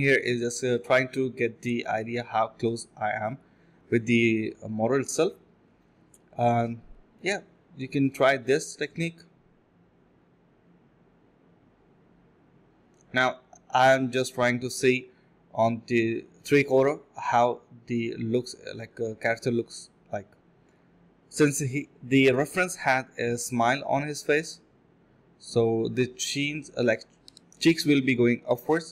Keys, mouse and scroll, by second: 0.5-2.7 typing, 4.7 alt+click, 5.0 alt+click, 5.2 alt+click, 5.4 alt+click, 5.9 alt+click, 6.1 ctrl+b, 6.8 typing, 7.2 double click, 7.8 alt+click, 8.0 d, 9.4 alt+click, 10.4 scroll down 1, 10.6 middle click, 10.9 scroll up 1, 11.1 middle click, 11.4 scroll down 1, 11.6 middle click, 12.1-15.3 scroll up 1, 20.2-21.1 typing, 22.4 ctrl+z, 23.0 ctrl+b, 23.7 alt+click, 26.9 alt+click.